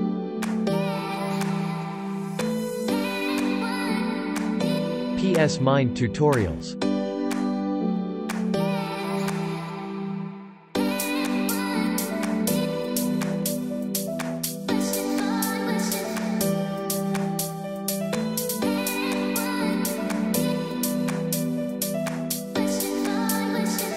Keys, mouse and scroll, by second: 0.1 click, 0.3 space, 0.4 click, 0.8 space, 3.7 l, 7.0 click, 14.5 ctrl+j, 15.7 v, 15.9 click, 20.7 Left.